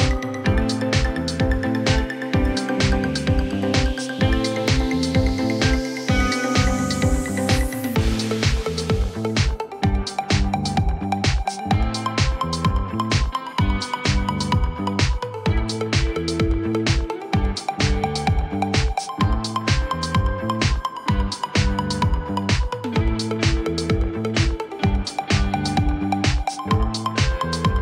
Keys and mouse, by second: 0.7 right click, 3.1-4.2 drag, 4.7 alt+click, 5.6 click, 7.5 alt+click, 7.9 alt+drag, 8.8 alt+middle click, 15.1 click, 16.7 alt+x, 19.3-21.0 drag, 22.1-23.6 drag, 25.6 click, 27.3 click.